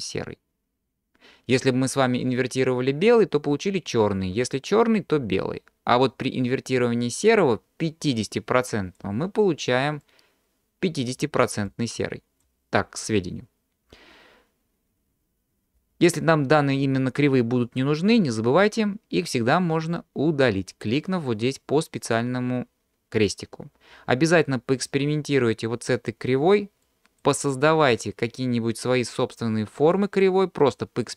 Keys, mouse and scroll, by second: 8.1 click, 10.0 click, 11.7 click, 15.9-19.1 scroll up 3, 24.4-25.0 scroll down 2, 26.8 click, 28.1 drag, 29.8 drag, 30.8-31.1 drag.